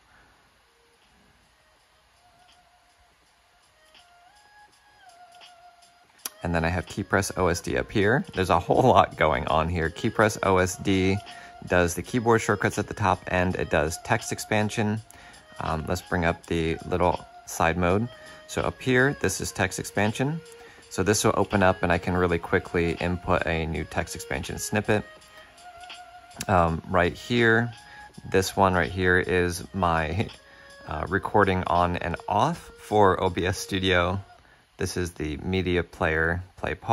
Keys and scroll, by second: 0.9 shift+super+q, 2.5 shift+super+d, 3.7 shift+super+a, 5.1 shift+super+d, 16.0 shift+super+q.